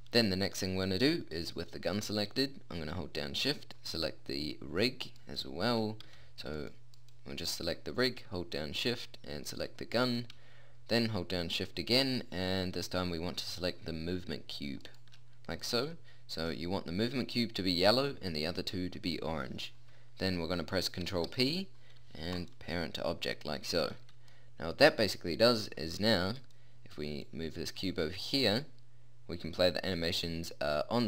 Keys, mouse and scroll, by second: 2.2-3.8 middle drag, 3.8-6.0 right drag, 6.0 a, 6.6-7.8 right drag, 9.4-12.9 right drag, 15.8-18.0 middle drag, 21.0 ctrl+p, 24.0 a, 30.4 middle click.